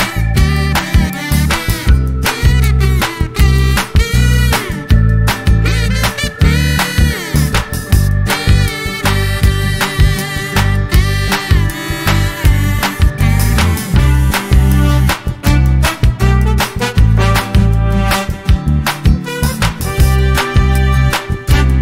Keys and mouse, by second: 2.5 click, 4.7 click, 6.1 click, 7.5-9.1 drag, 9.7-11.5 drag, 12.8 click, 13.4 click, 14.9 click, 17.0 ctrl+shift+f, 19.5 click.